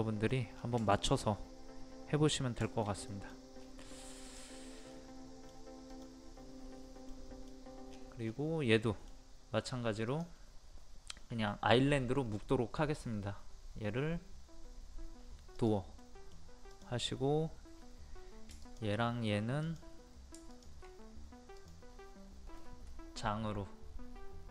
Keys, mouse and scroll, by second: 0.3 scroll down 1, 0.9 shift+middle click, 1.2-2.5 middle drag, 2.6-3.1 shift+scroll up 1, 3.1 middle click, 3.6 scroll up 1, 4.2 click, 4.9 middle click, 5.9 click, 7.1 middle click, 7.9-8.2 scroll down 1, 8.7 middle click, 10.1 click, 16.0 middle click, 16.7 click, 18.6 shift+click, 20.5 shift+click.